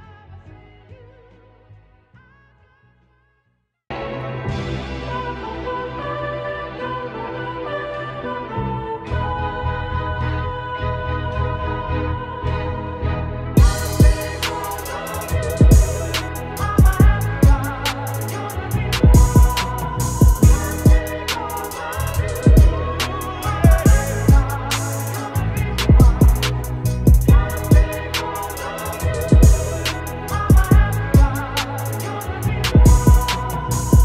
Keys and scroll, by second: 5.0 ctrl+BackSpace, 5.2-12.3 typing, 5.8 ctrl+z, 5.8 ctrl+=, 6.2 ctrl+z, 10.9 ctrl+z, 11.0 ctrl+x, 11.2 ctrl+z, 11.3 ctrl+[, 13.4 v, 15.0 space, 15.6 -, 21.1 ctrl+s, 22.1 space, 22.6 ctrl+s, 24.7 -, 27.1 alt+BackSpace.